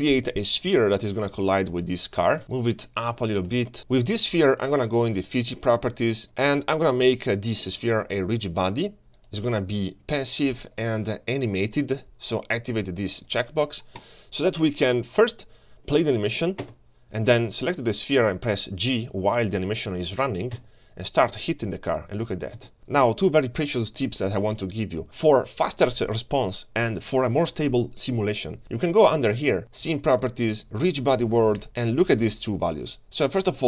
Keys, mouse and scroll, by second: 0.7 shift+right click, 0.7 click, 0.7-1.1 shift+scroll up 1, 1.2 shift+a, 2.4 g, 2.8 scroll down 1, 3.1 shift+middle drag, 3.3 shift+scroll down 1, 3.5 g, 3.8 right click, 5.2 click, 6.2 click, 7.9 click, 9.2-10.2 drag, 13.2 click, 16.6 space, 17.5 click, 20.6 g, 22.8 shift+middle click, 22.8 scroll down 1, 23.6 scroll up 2, 24.7-25.0 scroll down 1, 30.0 click, 31.3 click.